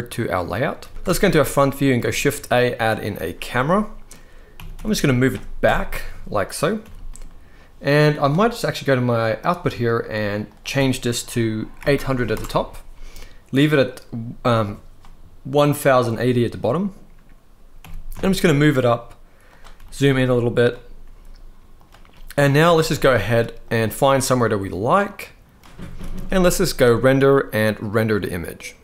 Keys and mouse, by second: 0.0 z, 0.6 ctrl+s, 0.7 ctrl+s, 0.9 KP_1, 1.8 shift+a, 3.3-3.7 middle drag, 4.2 g, 4.4 y, 5.3 KP_0, 6.5 g, 6.6 middle click, 7.8 right click, 10.1-12.0 drag, 11.7 0, 17.5 g, 17.8 z, 19.4 g, 20.3-20.6 drag, 20.7 g, 22.2 shift+middle click, 22.5 ctrl+s, 22.7 ctrl+s, 23.5-25.5 drag, 25.7 ctrl+s, 25.8 ctrl+s, 25.9 ctrl+s, 26.7-28.8 drag.